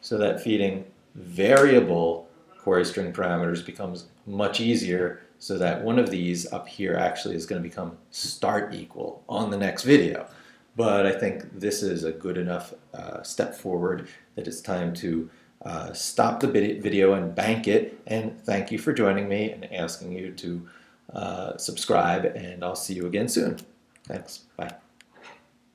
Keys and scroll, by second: 6.4 Up, 6.7 Right.